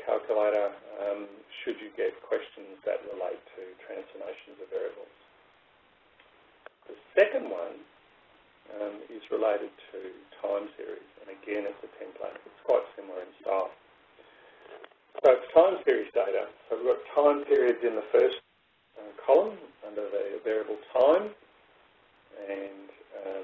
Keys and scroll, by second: 22.6 Down.